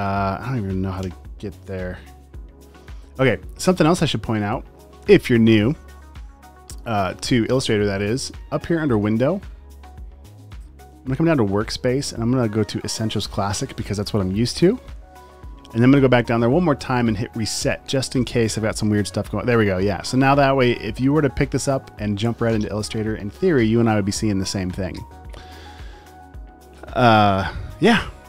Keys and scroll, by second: 1.0 p.